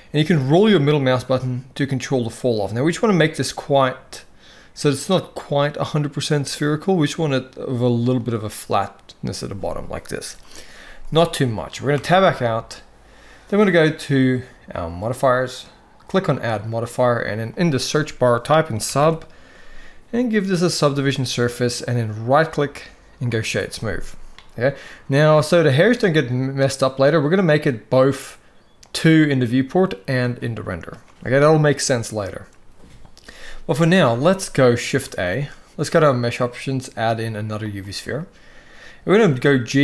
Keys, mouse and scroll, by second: 11.7 Tab, 14.4 click, 16.1-20.6 drag, 22.0-23.1 right drag, 28.6 click, 34.8 shift+a, 38.9 g.